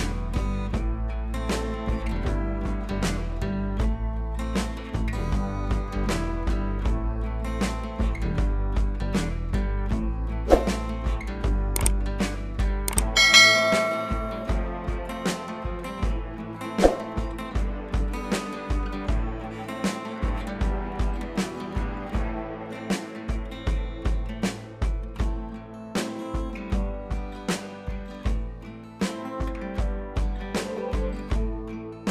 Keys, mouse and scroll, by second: 0.0-1.6 scroll up 2, 2.3 click, 4.2 click, 6.3-7.3 scroll down 1, 7.3-7.9 drag, 11.2 Right, 11.4 Up, 12.7 click, 12.8 scroll up 1, 13.3 click, 13.5 Left, 13.8 click, 14.4 scroll down 1, 14.9 click, 15.2 Left, 15.6 Down, 16.4-19.5 drag, 22.2 scroll down 1, 23.7-24.3 scroll up 1, 24.3-26.8 drag.